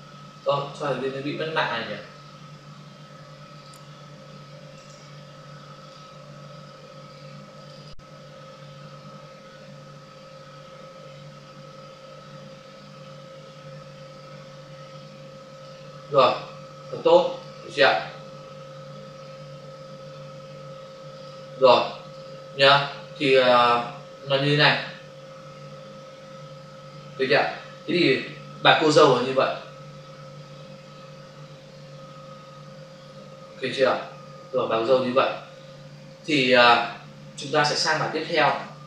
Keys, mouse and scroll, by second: 0.3 click, 3.5 click, 4.7 right click, 7.5 click, 15.4 click, 17.3 click, 21.2 click, 22.0 click, 22.2 double click, 28.8 ctrl+s, 38.5 ctrl+s.